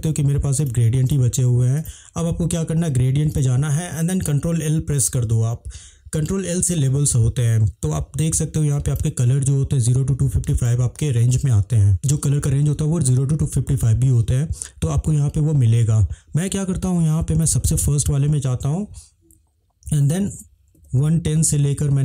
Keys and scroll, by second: 4.8 ctrl+l, 20.0-21.4 typing.